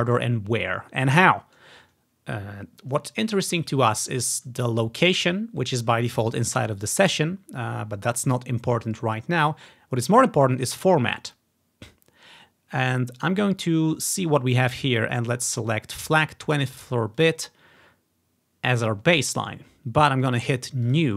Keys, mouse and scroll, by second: 5.3 click, 13.3 click, 17.3-18.8 drag, 21.0-21.1 drag.